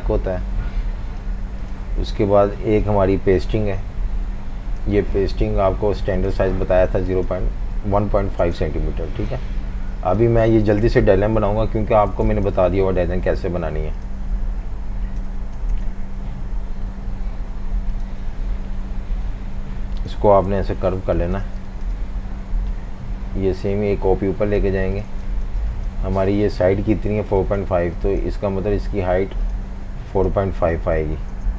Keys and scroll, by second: 7.5-8.7 typing, 10.3 v, 10.5 space, 11.5 super+-, 12.2 v, 15.0-16.6 typing, 18.9 Page_Down, 20.5 Up, 21.4 typing, 25.1 v, 25.2 space, 30.5-31.5 typing.